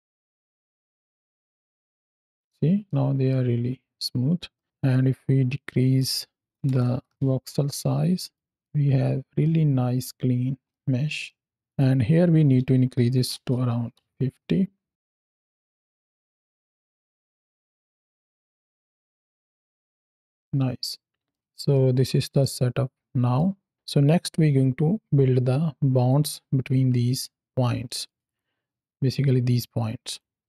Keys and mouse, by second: 2.3 space, 2.7-3.2 middle drag, 3.2 space, 3.9 space, 4.4 middle click, 5.8-7.1 drag, 7.7 middle click, 8.8 space, 9.3-9.9 middle drag, 10.4 space, 10.5 middle drag, 10.7 space, 11.0 space, 11.1-11.6 middle drag, 11.6-14.0 drag, 11.6 space, 15.2 shift+Left, 15.4 space, 16.0-17.7 middle drag, 18.3-19.1 middle drag, 20.2 space, 21.2 click, 21.3 ctrl+space, 21.6 ctrl+click, 22.2 click, 26.3 ctrl+space, 27.7 click, 28.2 ctrl+shift+click, 29.9 click, 30.3 x.